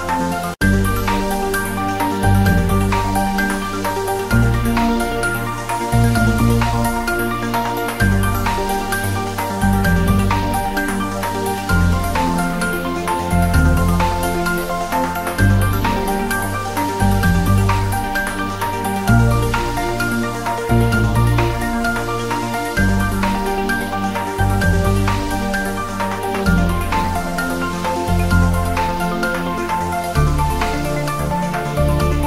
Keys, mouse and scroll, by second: 20.0-25.9 drag, 27.3 scroll down 1, 28.3 click, 30.8 scroll down 1, 31.4 click.